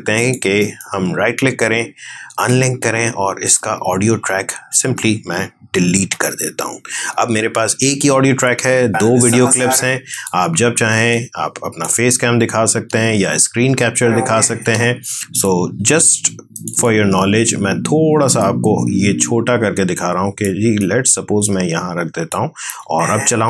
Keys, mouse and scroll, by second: 0.5 right click, 2.3 click, 5.9 Delete, 8.7 space, 10.0-12.6 drag, 12.6 space, 15.2-22.6 drag, 22.6 space.